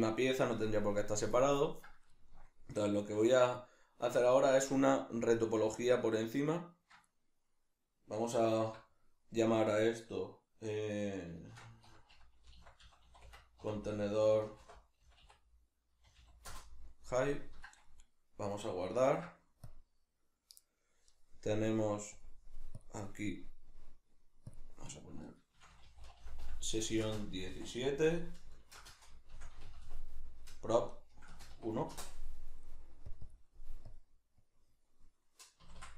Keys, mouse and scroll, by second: 19.0 ctrl+s.